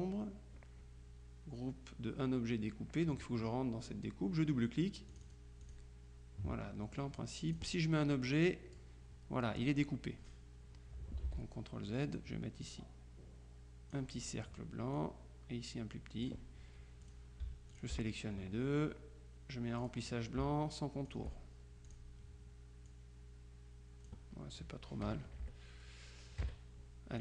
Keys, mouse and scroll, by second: 5.2 click, 7.6 click, 8.3 click, 11.3 ctrl+z, 12.7-14.5 drag, 15.0-16.8 drag, 17.1 click, 17.8 shift+click, 19.9 click, 21.1 shift+click, 21.9 click, 23.0-24.7 drag, 25.1 KP_Add, 25.3 KP_Subtract, 26.5 KP_Subtract.